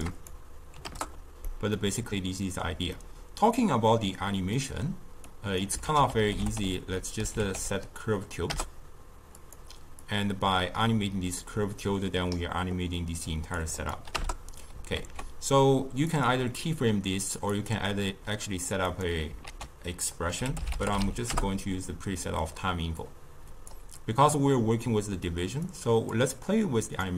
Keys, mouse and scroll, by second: 0.1-1.4 drag, 1.4-5.2 middle drag, 5.2-5.8 drag, 5.8 ctrl+a, 10.0-14.9 drag, 14.9 ctrl+a, 17.5-19.0 drag, 19.4 ctrl+a, 23.0-27.1 drag.